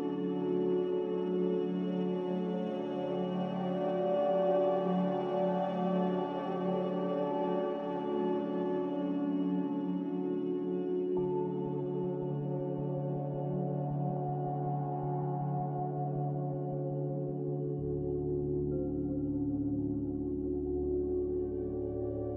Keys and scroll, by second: 1.7-3.9 typing, 6.6 Tab, 7.6 Return, 21.1 n.